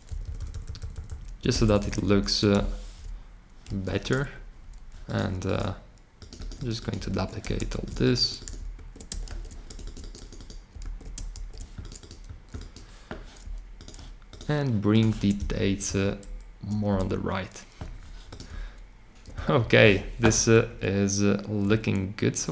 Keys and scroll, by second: 0.0 Right, 0.3 Right, 0.9 Right, 1.0 Right, 1.5 alt+shift+Left, 1.6 alt+shift+Left, 2.0 alt+shift+Left, 3.6 super+c, 7.0 super+a, 7.5 super+c, 9.2 super+v, 10.8 super+a, 11.3 super+v, 15.5 shift+Right, 15.8 shift+Right, 16.8 Left.